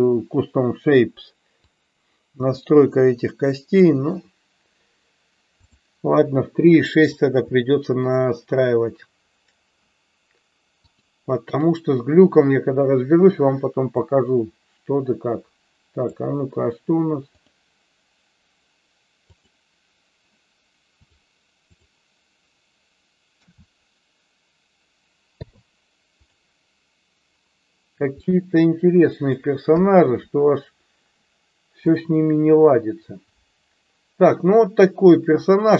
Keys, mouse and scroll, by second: 1.9-3.9 drag, 7.7 shift+middle click, 10.8 click, 13.9-16.2 drag, 17.4-18.5 drag, 21.0 click, 23.4 a, 25.4 i, 28.3-29.3 middle drag, 29.7 KP_1, 35.4 click.